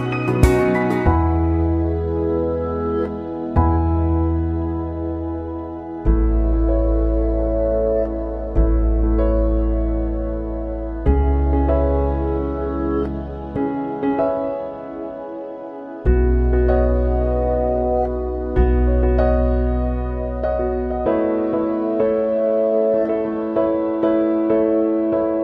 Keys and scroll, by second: 21.5 Delete.